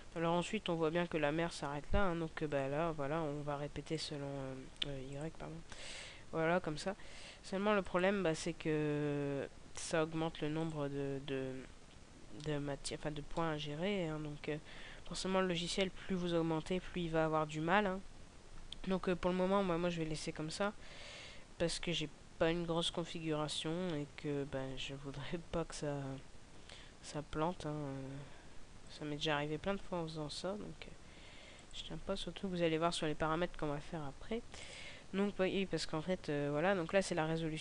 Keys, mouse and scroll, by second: 0.1 KP_0, 2.5 right click, 3.8 click, 5.1 click, 5.7 click, 10.4 click, 12.3 middle click, 12.9 scroll down 1, 13.2 middle click, 15.0 middle click, 20.3 KP_0, 22.7 right click, 26.4 g, 28.9 click, 29.9 g, 31.6 click, 34.5 right click.